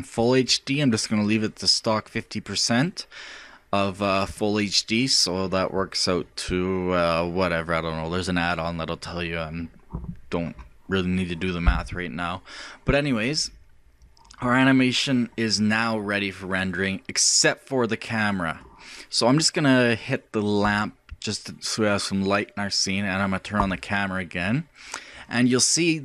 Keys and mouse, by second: 16.0-17.8 drag, 20.6-22.5 drag, 23.6-25.4 drag.